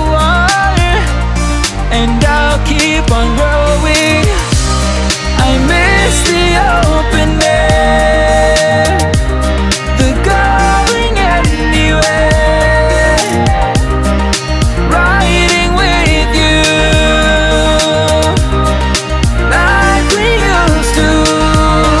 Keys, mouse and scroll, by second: 0.9 right click, 2.3 shift+d, 3.8-6.7 drag, 11.0-13.9 drag, 15.4 right click, 17.0 right click, 21.1-21.9 drag.